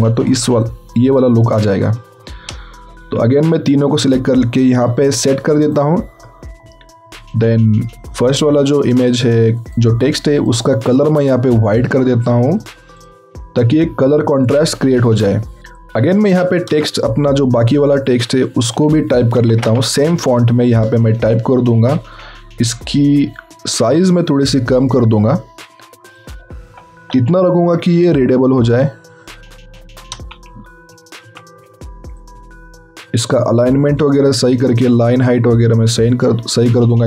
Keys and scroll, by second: 2.9 ctrl+t, 19.3 ctrl+c, 19.7 alt+Tab, 21.1 ctrl+v, 21.7 ctrl+a, 27.1 Return.